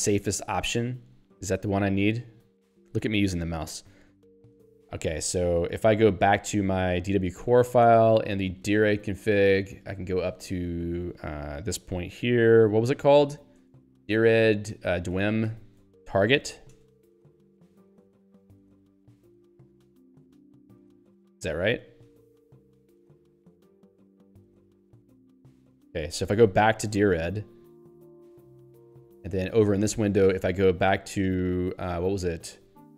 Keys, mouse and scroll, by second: 0.3 click, 2.7 click, 4.5 alt+w, 7.5 ctrl+n, 7.9 Return, 8.9 ctrl+p, 11.0 ctrl+n, 12.6 ctrl+p, 13.2 End, 13.6 Return, 13.8-15.1 typing, 16.8 space, 17.3 ', 18.1 ctrl+alt+i, 19.9 ctrl+y, 21.1 ctrl+d, 23.8 ctrl+n, 25.5 ctrl+e, 27.9 ctrl+n, 28.3 Return, 29.6 alt+o.